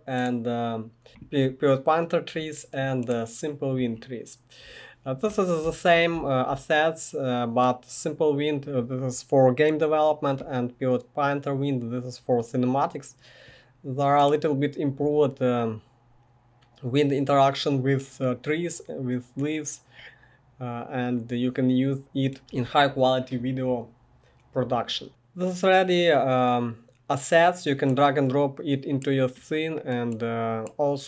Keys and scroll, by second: 5.6-6.1 typing.